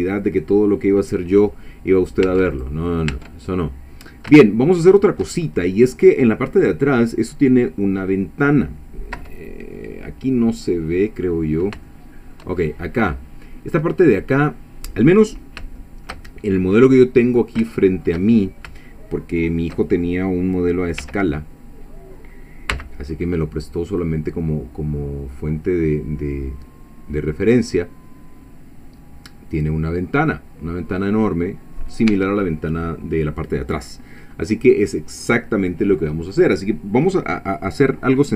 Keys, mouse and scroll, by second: 2.3 Tab, 2.5 click, 3.1 Tab, 3.6 click, 3.7 middle click, 8.0-8.3 scroll up 1, 8.4 scroll down 1, 9.2 1, 10.7-11.1 scroll down 1, 11.9 shift+middle click, 12.6-13.1 shift+scroll up 1, 15.3-15.7 scroll down 1, 15.8 shift+click, 16.4 shift+middle click, 17.3-17.6 scroll up 1, 17.7-18.8 shift+middle drag, 18.9 shift+middle click, 21.0 3, 22.7 c, 24.0-32.1 drag, 32.1 Escape.